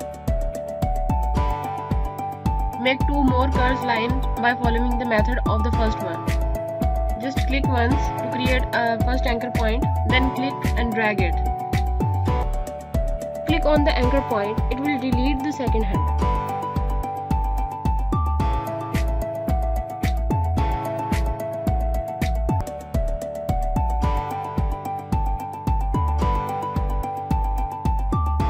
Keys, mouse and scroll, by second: 2.6 scroll up 1, 2.9 click, 7.4 click, 10.2 click, 17.3 click, 26.0 click.